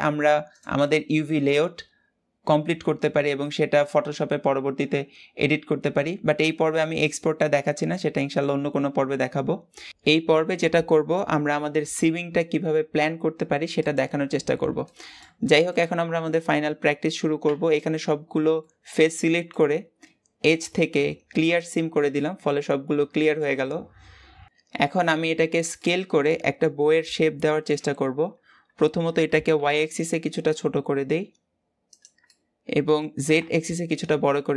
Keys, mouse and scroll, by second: 13.8 click, 14.2-14.6 scroll down 2, 14.7-17.3 middle drag, 17.3 a, 18.4-21.5 middle drag, 21.5 click, 22.0-27.7 middle drag, 27.7 KP_7, 28.9 s, 32.1 middle click, 32.9 s.